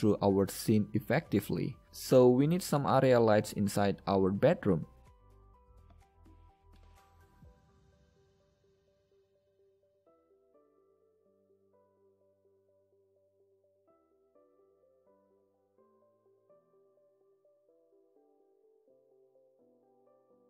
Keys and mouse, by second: 2.0 n, 2.1 KP_0, 4.4 shift+a, 12.5 KP_Decimal, 17.5 KP_7, 17.9 KP_5, 19.0 g.